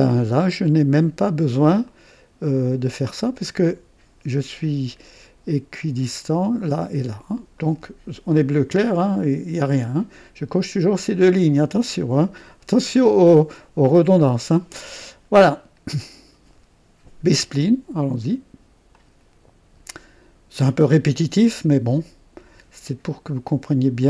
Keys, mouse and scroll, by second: 0.2 right click, 1.8 click, 7.6 right click, 15.3 right click, 18.9 click, 20.8 click.